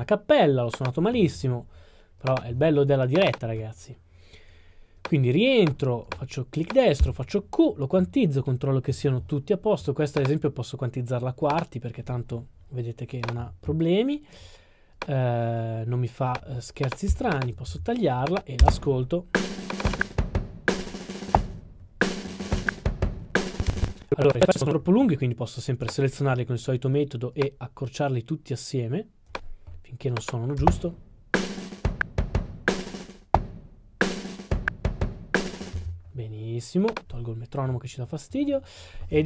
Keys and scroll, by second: 7.0 q, 17.2 s.